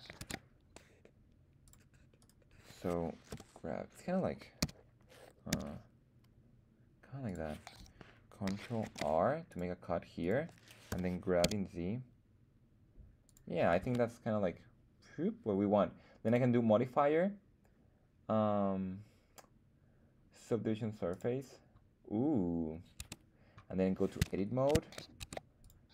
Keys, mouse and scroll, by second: 0.2 ctrl+Tab, 2.2 click, 2.2 right click, 3.3 g, 4.6 z, 5.5 x, 7.2 click, 8.8 ctrl+r, 10.2 click, 10.9 g, 11.4 z, 13.2 click, 13.8 Tab, 16.2-21.2 drag, 23.0 Tab, 24.3 shift+middle click, 25.2 ctrl+Tab.